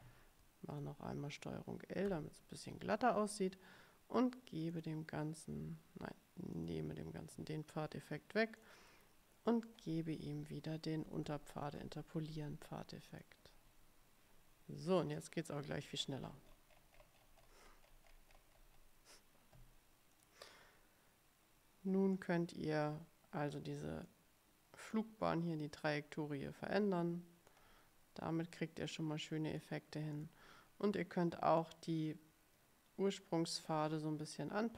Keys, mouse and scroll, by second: 0.8 ctrl+l, 2.2 ctrl+l, 4.8 click, 6.7 click, 8.7 click, 10.9-12.3 typing, 13.2 click, 15.3 click, 15.6-19.0 scroll up 2, 20.3 click, 22.3 click, 24.2-25.2 drag, 25.9-27.8 drag, 28.7-29.9 drag, 30.2 click, 31.7-34.7 drag.